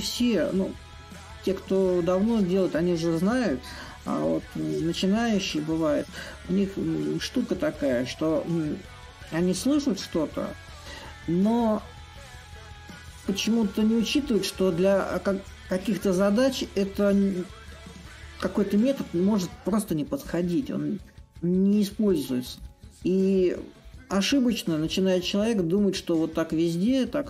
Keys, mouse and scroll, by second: 4.0-9.1 drag, 9.8-12.2 drag, 12.4-17.5 shift+drag, 18.4-23.5 drag, 24.5-27.2 drag.